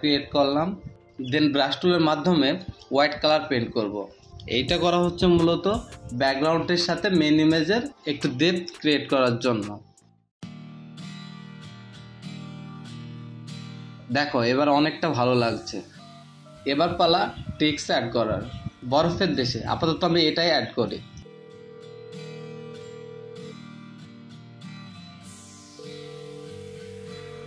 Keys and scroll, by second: 5.0-7.9 typing, 8.0 ctrl+z, 9.3 ctrl+z, 10.0 v, 16.5-18.8 typing, 24.4 ctrl+v, 25.8 v, 26.2 ctrl+t.